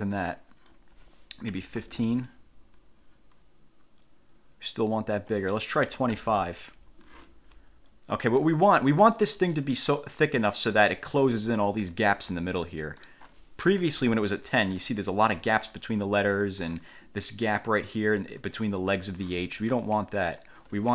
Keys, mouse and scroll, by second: 0.5 click, 1.7 1, 2.0 5, 2.1 Return, 5.1 click, 6.1 2, 6.3 5, 6.5 Return, 7.9-8.3 ctrl+scroll up 2, 13.1 click, 13.6-14.5 typing, 20.5 click.